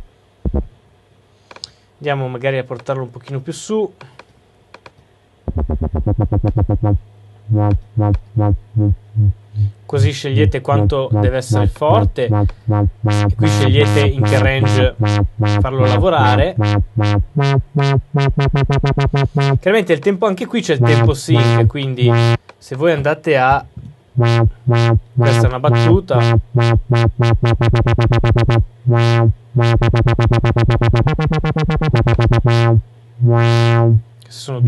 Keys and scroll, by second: 23.6 Return.